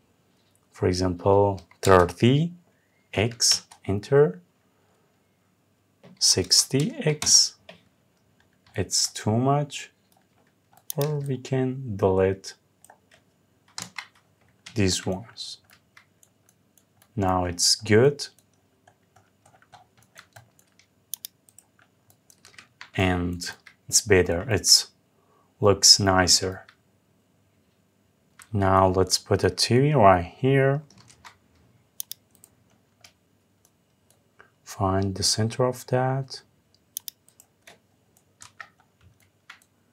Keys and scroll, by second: 3.1 Return, 6.8 Return, 13.4 Delete, 22.2 Escape, 30.6 ctrl+v, 38.0 Up.